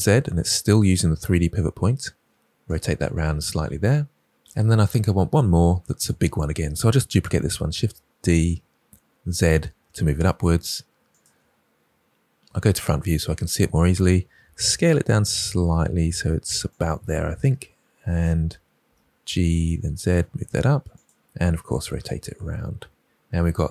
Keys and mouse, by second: 2.6 click, 7.3 shift+d, 7.6 z, 11.0 click, 12.4 KP_1, 14.3 s, 16.6 click, 17.4 f, 18.9 g, 19.2 z, 20.9 click, 21.6 z, 21.8 r.